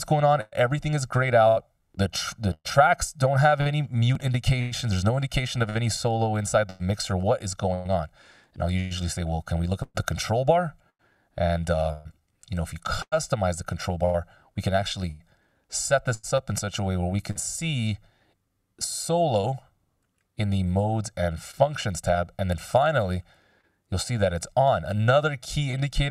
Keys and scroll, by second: 6.1 x.